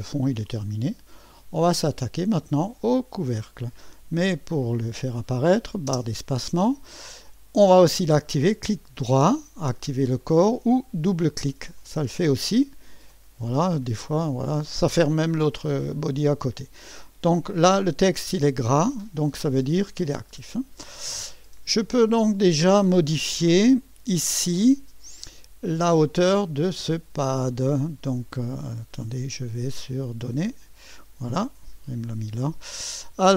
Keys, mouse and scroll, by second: 0.5-2.1 drag, 4.7 click, 5.9 space, 8.1-9.1 middle drag, 10.2 click, 11.6 click, 11.8 click, 13.1 click, 13.6 click, 18.6 click, 23.7 click, 26.3 click, 30.3 click.